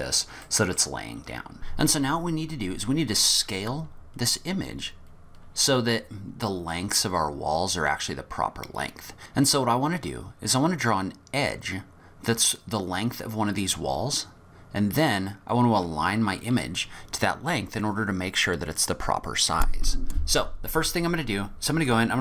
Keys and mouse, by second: 0.5-0.9 middle drag, 1.3 middle click, 1.5 middle click, 2.5 middle click, 2.7 middle click, 9.2 shift+Tab, 10.1 middle click, 21.9 click.